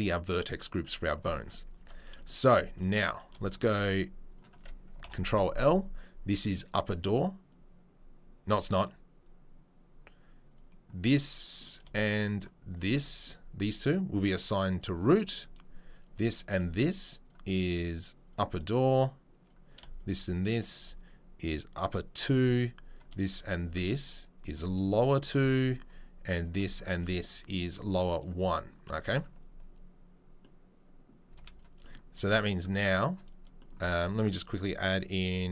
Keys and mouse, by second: 1.8 Tab, 2.4 3, 4.9 ctrl+click, 5.0 ctrl+l, 5.1-6.4 middle drag, 6.4-11.8 drag, 11.8-17.2 shift+middle drag, 12.3 shift+click, 14.8-15.9 drag, 17.2-19.5 right drag, 19.5 middle click, 19.9 shift+click, 20.0 shift+middle click, 20.5 shift+click, 20.6-21.3 shift+middle drag, 21.3 click, 21.4-27.6 middle drag, 22.0 click, 22.0 right click, 23.3 shift+click, 24.4 click, 25.2-26.3 drag, 27.6 click, 27.7 middle click, 28.1-31.5 drag, 31.5-34.9 middle drag, 32.1 Tab, 34.9 drag, 35.1-35.5 middle drag.